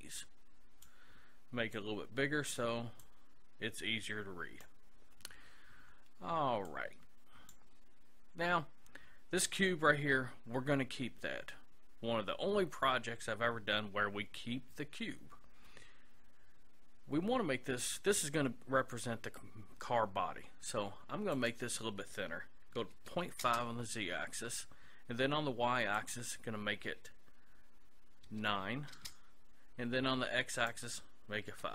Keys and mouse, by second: 0.0-4.8 drag, 6.7-8.4 drag, 9.4-11.2 right drag, 21.4-23.1 drag, 26.0-27.7 drag, 30.6-31.7 drag.